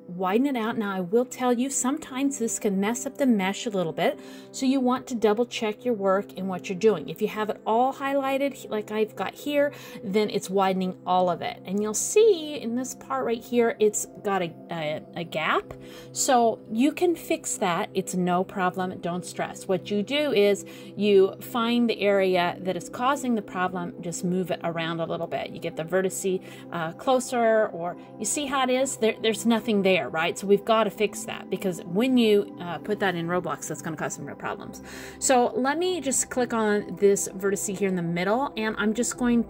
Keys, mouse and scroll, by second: 3.2 a, 5.0 ctrl+a, 7.6 middle click, 9.6-10.0 scroll up 3, 10.0 middle click, 12.4 middle click, 13.4 middle click, 16.6 middle click, 17.4 scroll up 3, 17.6-18.8 scroll down 3, 18.1 middle click, 20.2 middle click, 21.8 scroll up 1, 22.0-22.5 scroll down 3, 22.3 middle click, 23.8 middle click, 26.8 alt+z, 27.2 middle click, 28.2-28.7 scroll up 5, 30.2-30.6 scroll down 3, 30.5 middle click, 33.2 alt+z, 34.2 middle click, 35.2 scroll down 2, 35.6 shift+middle click, 36.0-36.4 scroll up 2, 36.4 middle click, 36.8 scroll down 1, 38.0 middle click, 38.8 click, 39.2 middle click.